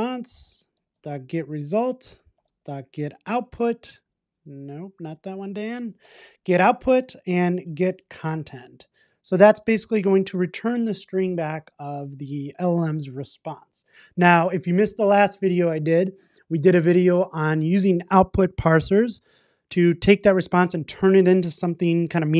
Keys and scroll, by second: 0.2 Return, 9.8 super+s.